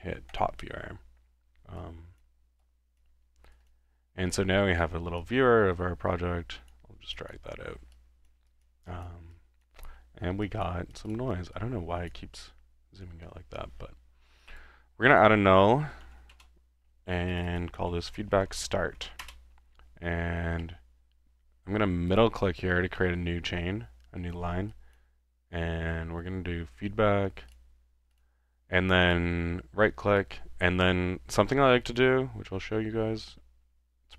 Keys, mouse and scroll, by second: 0.3 click, 1.8 click, 2.6 click, 3.7 click, 4.0 middle click, 5.0-5.7 typing, 5.2-6.8 drag, 7.1-7.4 drag, 7.9 click, 8.5 click, 8.9 drag, 9.4-9.8 drag, 10.1-10.4 middle drag, 10.4-11.1 typing, 10.4 click, 10.9 click, 11.5-12.2 drag, 12.4-13.4 middle drag, 14.5 click, 15.2 click, 15.6-16.7 typing, 20.6 middle click, 22.1 click, 23.0 middle click, 25.7-26.5 typing, 27.5 drag, 28.2 click, 29.1 click, 32.5-33.4 middle drag, 32.5-33.4 scroll up 1, 33.7-34.1 middle drag, 33.7-34.1 scroll up 1.